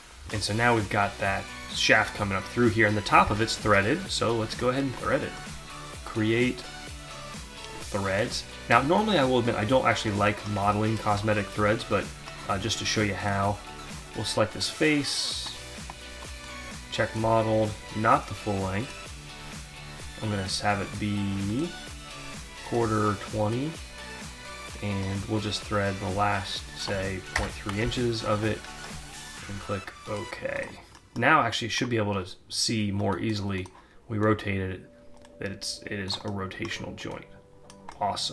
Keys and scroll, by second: 0.2 alt+Tab, 26.9 BackSpace, 27.7 Tab.